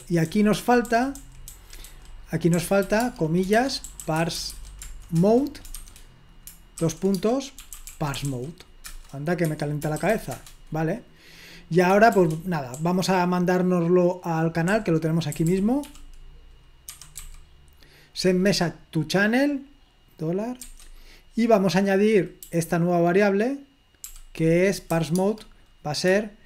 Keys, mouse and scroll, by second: 0.0-8.8 typing, 8.8 Return, 9.4 Escape, 9.8-10.6 typing, 13.0-13.8 typing, 15.1-17.8 typing, 20.7 shift+4, 22.5 h, 24.0 i, 25.2 typing.